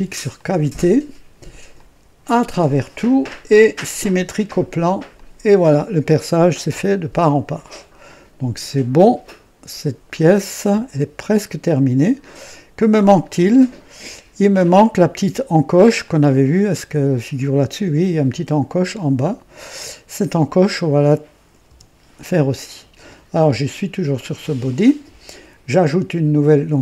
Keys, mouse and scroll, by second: 0.3 click, 1.7 click, 2.4 click, 3.8 click, 5.1 click, 6.0-12.6 drag, 12.7-14.1 drag, 16.0 click, 19.7 click, 21.6 KP_2, 22.1 right click.